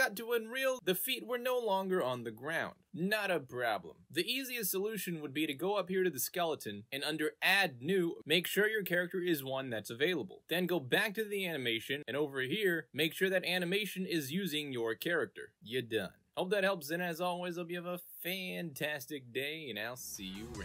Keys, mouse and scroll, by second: 5.3 alt+click, 7.2 click, 9.2 click, 9.2-10.6 typing, 11.3 click, 12.1 click, 14.6 click, 15.2 alt+click, 16.0 alt+right click, 16.1 w, 16.2 click.